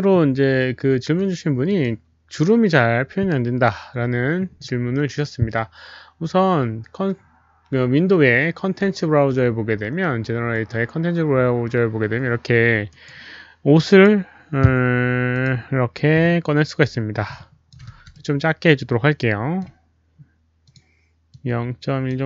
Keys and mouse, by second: 1.6 ctrl+n, 1.6 click, 1.7 ctrl+n, 7.7 ctrl+n, 7.7 click, 10.5 click, 12.8 right click, 13.7 click, 15.3 click, 16.8 click, 17.2 alt+click, 17.8 r, 18.1-19.5 middle drag, 20.6 alt+click, 21.2 alt+click, 22.0 middle click, 22.0 right click, 22.0-22.2 typing.